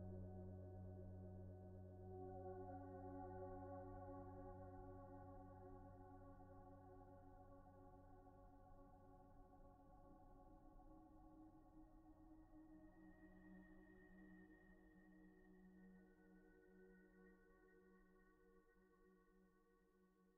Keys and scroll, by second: 15.9 t, 16.7 z.